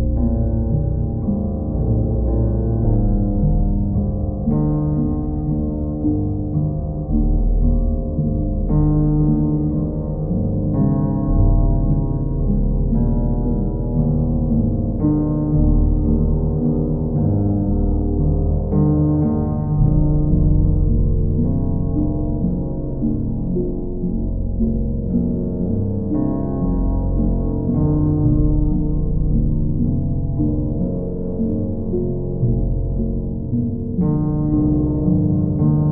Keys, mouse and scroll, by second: 0.5 click, 2.4 click, 5.7 click, 6.3 click, 7.2 click, 7.6 shift+click, 8.4 shift+click, 10.3 click, 16.5 click, 17.0 alt+click, 17.5 click, 18.1 click, 18.3 alt+click, 21.5 alt+click, 22.2 alt+click, 22.5 shift+click, 23.1 alt+click, 27.4 click, 32.6 alt+click, 33.3 click.